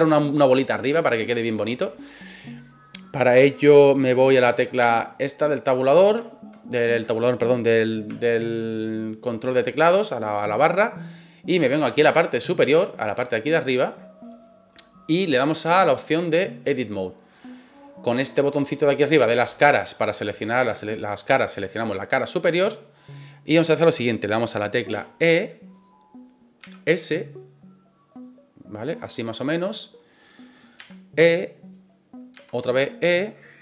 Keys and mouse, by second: 1.4-1.9 middle drag, 4.8 KP_Divide, 8.2-9.2 shift+middle drag, 11.8-12.1 shift+middle drag, 12.8 shift+middle drag, 13.2 middle click, 14.4 middle click, 16.1 click, 21.5 right click, 22.4-23.6 middle drag, 24.9 e, 25.7 click, 26.6 s, 28.8 click, 29.1 middle click, 30.8 e, 31.7 click, 32.3 e, 33.2 click.